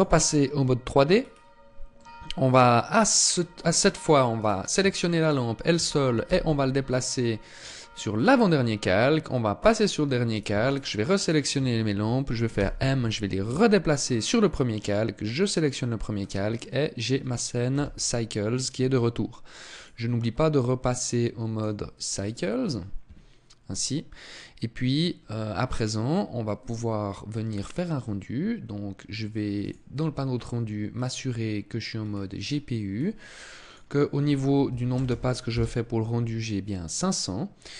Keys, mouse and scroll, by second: 0.5 scroll down 2, 1.3 middle click, 2.5 scroll down 1, 3.7 right click, 4.5 shift+right click, 5.5 m, 8.9 click, 9.6 right click, 9.9 shift+right click, 10.7 right click, 11.9 m, 14.6 click, 15.3-15.9 scroll up 2, 15.9 middle click, 17.0 KP_0, 17.9-18.3 scroll up 2, 19.1 click, 24.5-26.1 scroll up 1, 28.9 click, 30.2 scroll down 1, 31.3-32.0 scroll down 6, 32.3-32.9 scroll down 1, 32.9 click.